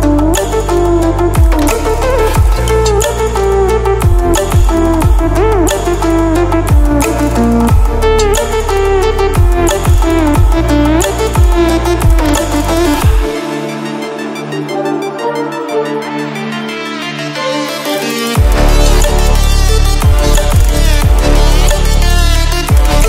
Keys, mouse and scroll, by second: 6.4 ctrl+w, 10.1-10.8 typing, 11.0 click, 13.6 click, 14.8-15.1 ctrl+alt+scroll up 1, 17.4 click, 21.4 ctrl+w.